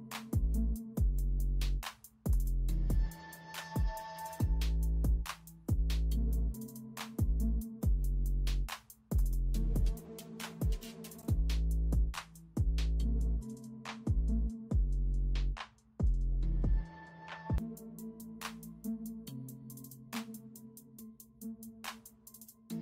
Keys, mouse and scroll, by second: 0.3 ], 3.9-5.0 typing, 6.2-7.0 typing, 8.6 space, 9.7 ], 11.2 space, 12.6 [, 12.7 ], 16.6-20.5 typing.